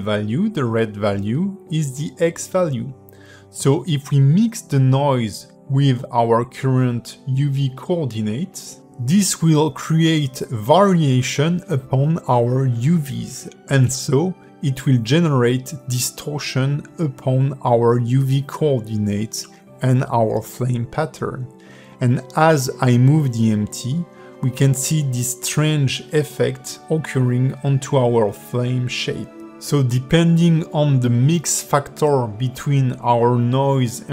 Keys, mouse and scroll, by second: 2.4 shift+a, 7.4 click, 10.8 click, 13.1 scroll down 4, 13.5 shift+middle click, 14.7 ctrl+shift+click, 20.9 click, 21.6 g, 26.7-27.7 scroll up 3, 27.7 click.